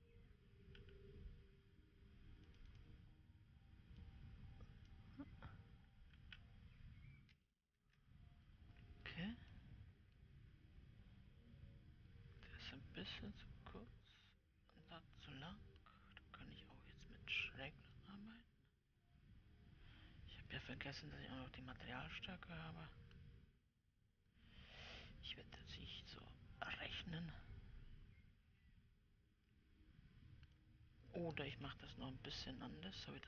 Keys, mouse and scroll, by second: 1.2 KP_8, 3.0-10.0 drag, 10.0-18.6 middle drag, 18.6-31.9 drag, 31.9 KP_7.